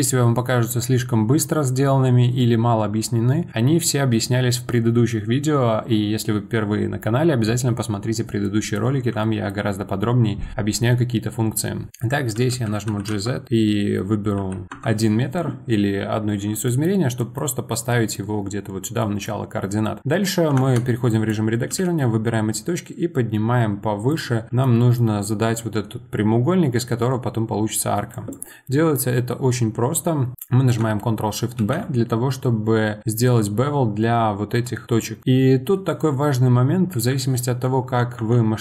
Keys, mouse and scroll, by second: 8.4-11.9 middle drag, 12.3 g, 16.7-17.6 middle drag, 17.6 scroll up 2, 17.9-20.6 middle drag, 20.6 Tab, 21.1 click, 21.6 g, 24.3 scroll up 2, 24.5-27.8 middle drag, 28.1 click, 31.6 ctrl+shift+b, 38.1 Tab.